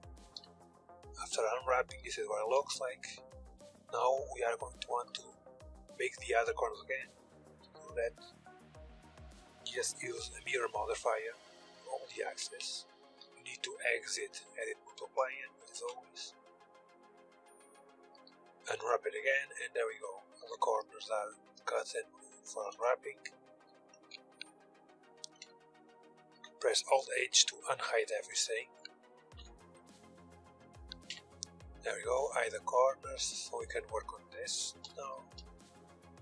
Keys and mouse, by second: 0.5-2.8 drag, 3.6 KP_1, 4.1-6.7 middle drag, 7.9-10.3 drag, 10.9-16.6 drag, 12.0 Tab, 12.6 Tab, 13.0 Tab, 15.3 Tab, 16.6-17.8 middle drag, 17.9 u, 20.1 z, 20.7 z, 22.3 KP_1, 24.7 Tab, 25.8 alt+h, 27.7 h, 28.8 ctrl+z, 30.6 h, 34.4 h, 34.7-36.2 drag, 34.9 h.